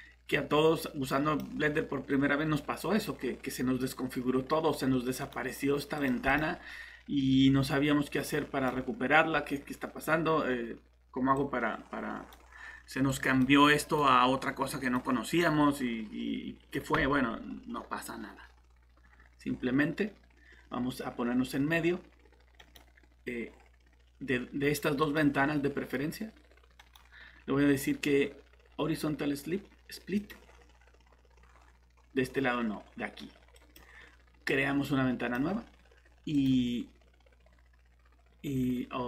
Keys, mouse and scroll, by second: 5.2 right click, 6.0 click, 22.6 right click, 25.0 click, 26.8 right click, 30.1 click.